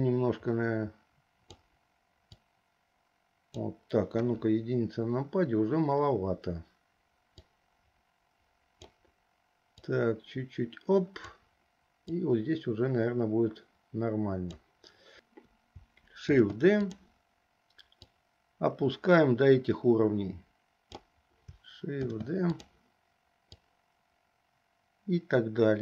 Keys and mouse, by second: 2.7-3.8 drag, 4.3 KP_1, 7.6-9.1 drag, 10.1-11.4 drag, 12.2 click, 12.4-14.7 drag, 16.4 shift+d, 18.1-21.0 drag, 22.1 shift+d, 23.7-25.8 drag.